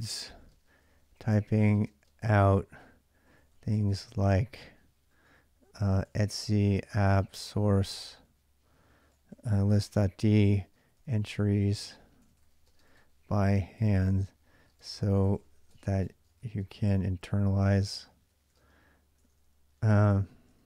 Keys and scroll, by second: 0.0-20.6 typing.